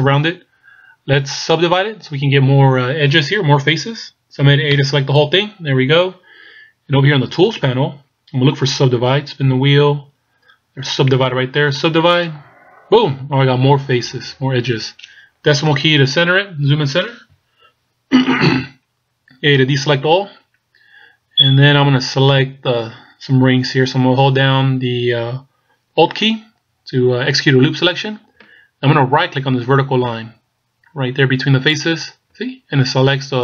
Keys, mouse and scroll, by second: 4.7 a, 9.0-9.6 scroll down 1, 9.6-12.2 scroll down 3, 12.2 click, 12.2-12.5 scroll down 1, 14.4-15.4 scroll up 1, 15.7 KP_Decimal, 19.7 a, 24.5-27.8 scroll up 2, 31.8 alt+right click.